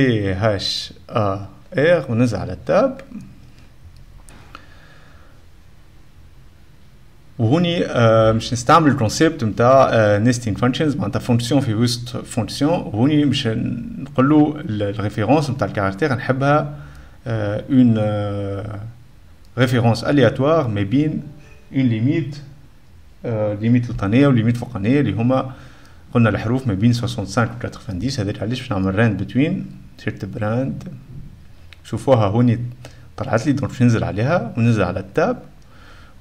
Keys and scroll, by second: 0.0-1.8 typing, 2.8 Tab, 3.6 `, 28.8-31.7 typing, 34.8 Tab, 35.2 Tab.